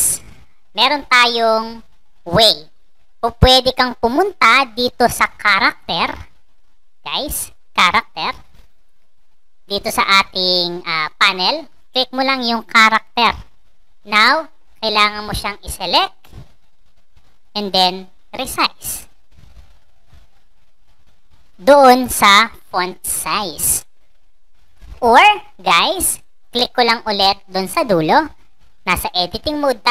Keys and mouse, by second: 15.2 click, 17.3-21.4 drag, 27.0 click.